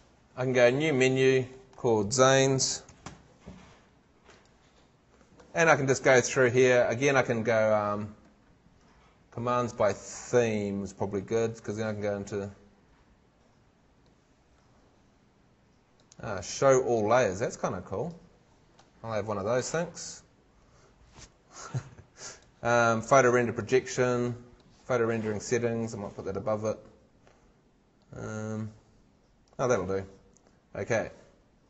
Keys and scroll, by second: 2.2-3.6 typing.